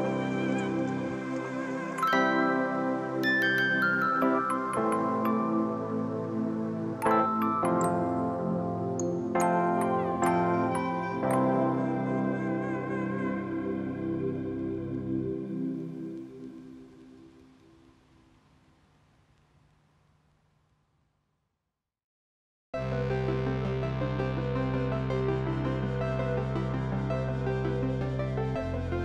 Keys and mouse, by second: 0.8 click, 3.3 click, 4.5 Escape, 6.4 click, 8.8 Escape, 9.2 click, 9.8 right click, 10.2 click, 12.0 alt+y, 12.3 click, 13.4 ctrl+shift+x, 13.7 click, 15.2 click, 16.2 click, 18.1 click, 21.3 click, 23.0 click, 24.0 ctrl+e, 24.0 ctrl+click, 24.5 click, 25.1 click, 26.9 click.